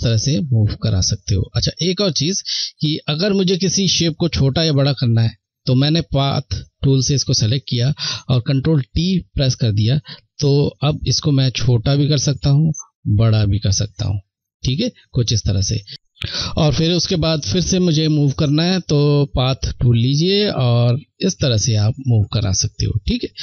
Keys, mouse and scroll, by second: 7.9 ctrl+Num_Lock, 7.9 click, 8.4 ctrl+t, 10.5 click, 17.8 click.